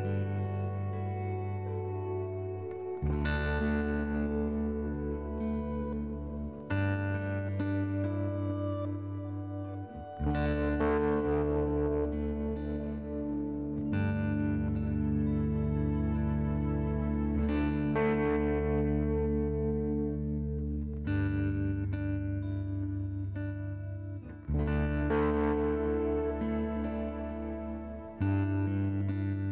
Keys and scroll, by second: 6.8 8, 13.9 p, 16.9 f, 17.3 z, 19.4 F3, 19.9 m.